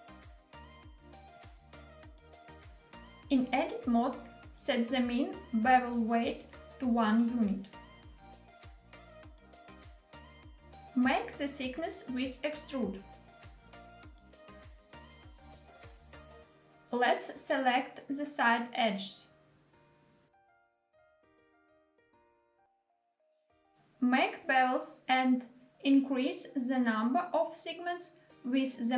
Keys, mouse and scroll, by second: 1.2 click, 3.6 Tab, 6.5-8.7 drag, 9.8 middle click, 10.9 e, 14.9 click, 15.6-16.3 middle drag, 17.2 click, 17.8-18.4 middle drag, 18.9 shift+click, 19.3-20.1 middle drag, 21.0 shift+click, 21.3-21.9 middle drag, 22.7 shift+click, 23.1-23.7 middle drag, 24.5 ctrl+b, 26.7-27.5 scroll up 1, 27.9-28.9 scroll up 1.